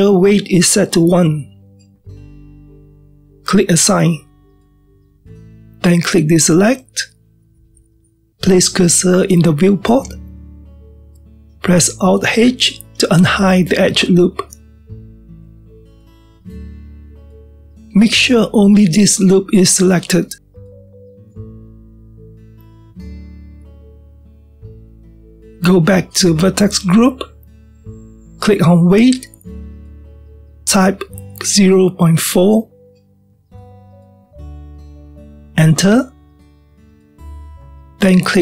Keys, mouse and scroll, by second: 4.6-10.6 drag, 14.2 alt+h, 15.5-18.6 middle drag, 19.0-24.3 shift+middle drag, 24.5-27.4 middle drag, 30.7-33.9 drag.